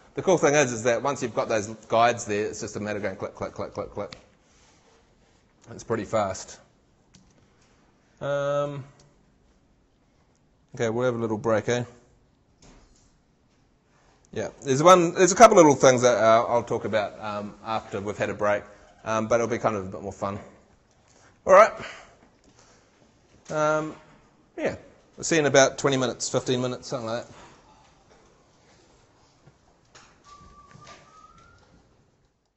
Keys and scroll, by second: 7.1 shift+super+Tab.